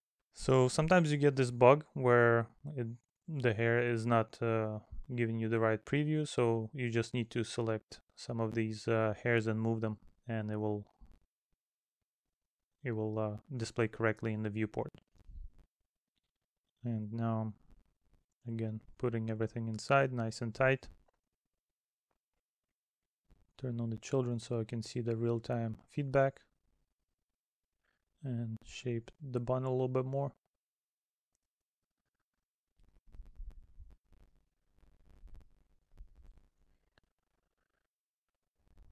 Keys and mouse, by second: 1.5 middle click, 3.2 middle click, 5.3 middle click, 9.0 middle click, 10.1 middle click, 11.7 middle click, 13.4 middle click, 14.5 middle click, 16.8 middle click, 17.5 middle click, 18.7 middle click, 19.3 middle click, 20.3 middle click, 22.0 middle click, 23.1 middle click, 24.0 middle click, 25.2 middle click, 25.9 middle click, 30.6 middle click, 32.3 middle click, 34.9 middle click, 36.3 middle click, 37.5 middle click, 38.2 middle click.